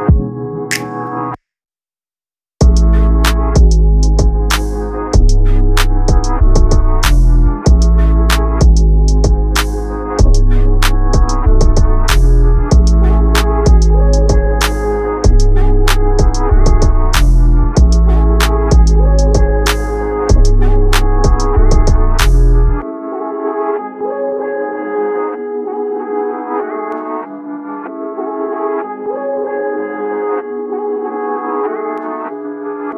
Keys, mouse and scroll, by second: 0.0-0.3 ctrl+scroll, 1.9-6.4 drag, 6.7-7.0 ctrl+scroll, 7.6 click, 8.7 ctrl+scroll, 9.5-18.6 drag, 20.2-21.9 drag.